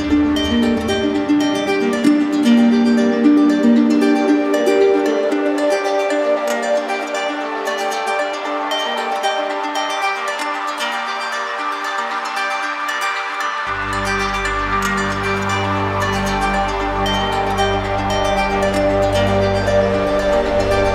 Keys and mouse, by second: 1.5 click, 3.7 click, 6.4 click, 8.5 click, 10.0 right click, 11.3 click, 12.9 right click, 14.5 click, 17.7 right click, 19.6-20.6 right drag, 20.7 z.